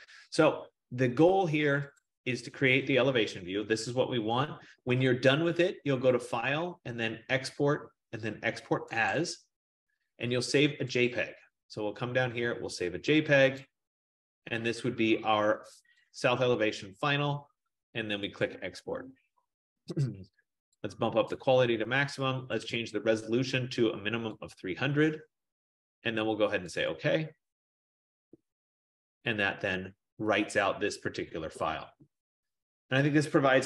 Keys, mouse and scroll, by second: 2.4 click, 6.4 click, 9.2 click, 11.5 click, 13.7 click, 16.3 click, 18.5 click, 22.1 click, 22.9 click, 24.7 click, 29.7 click.